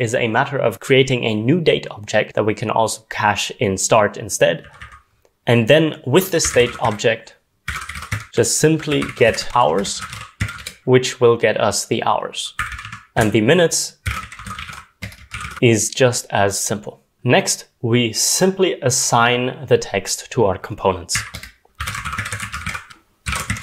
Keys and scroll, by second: 2.6-3.4 typing, 4.5-5.3 typing, 7.4-11.3 typing, 12.6 Escape, 12.7-16.3 typing, 21.1-23.6 typing, 21.3 Return.